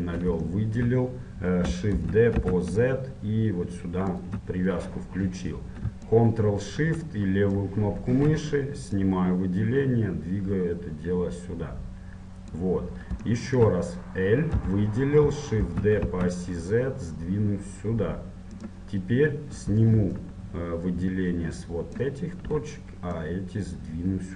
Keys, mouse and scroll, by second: 0.1-2.9 middle drag, 2.1 shift+d, 7.7-11.0 drag, 13.5-15.7 middle drag, 14.7 l, 15.7 shift+d, 22.2-24.3 drag.